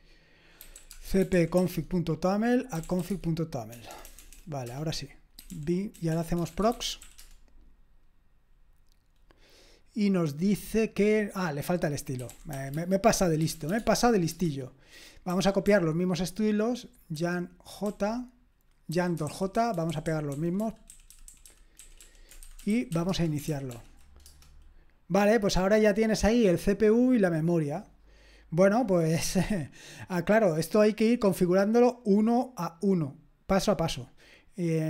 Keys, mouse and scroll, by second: 0.5-7.8 typing, 12.0-17.9 typing, 14.3 Return, 18.9-24.3 typing, 29.9-30.8 scroll up 1, 30.8-32.7 scroll up 1, 32.7-34.8 scroll up 1.